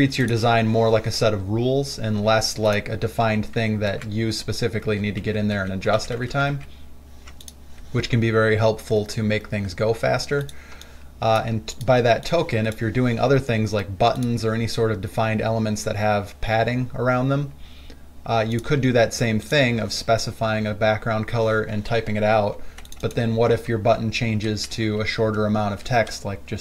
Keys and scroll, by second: 4.1 ctrl+alt+x, 5.1 ctrl+alt+z, 5.5 ctrl+alt+z, 5.8 ctrl+alt+z, 6.4 ctrl+z, 6.8 ctrl+z, 11.0 space, 23.6 ctrl+a.